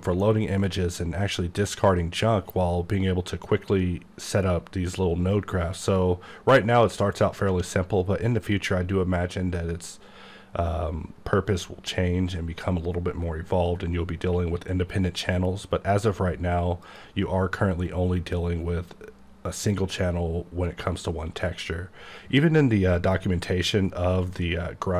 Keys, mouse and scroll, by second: 7.5 click, 16.9 click, 22.9 click.